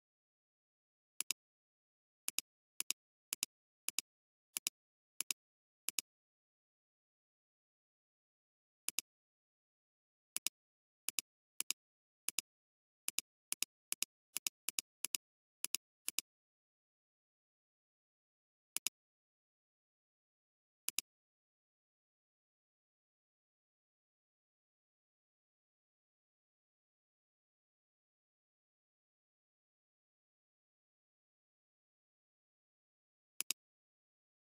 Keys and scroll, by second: 0.1 [, 15.1 space, 18.7 alt+space, 19.5 alt+space, 20.8 alt+space, 33.4 alt+space, 34.2 alt+space.